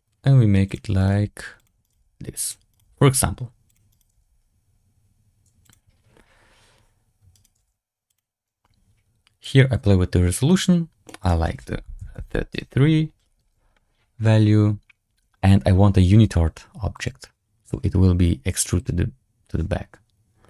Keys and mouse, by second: 0.9 right click, 1.0 g, 1.7 right click, 1.9 g, 2.6 right click, 2.7 g, 3.8 right click, 4.0 g, 7.2 right click, 7.5 g, 9.4-11.0 drag, 11.1-12.5 drag, 12.0 KP_3, 16.8 click, 18.7-20.0 drag.